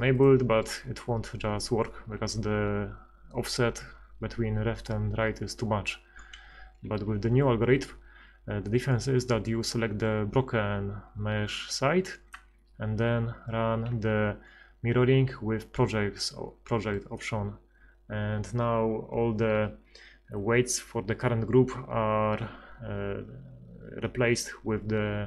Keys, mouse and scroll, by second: 6.5 a, 8.3 b, 13.9 ctrl+x.